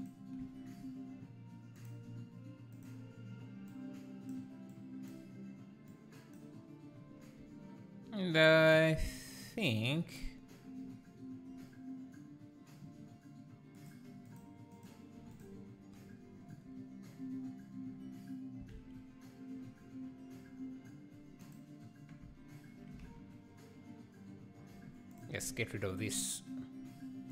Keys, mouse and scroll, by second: 0.0 click, 2.7 click, 8.8 click, 13.8 click, 14.3 click, 14.8 click, 15.3 click, 16.5 Delete, 21.3 ctrl+z, 21.4 scroll down 2, 21.5 click, 22.3 `, 25.8 alt+a, 25.9 click, 26.0 click.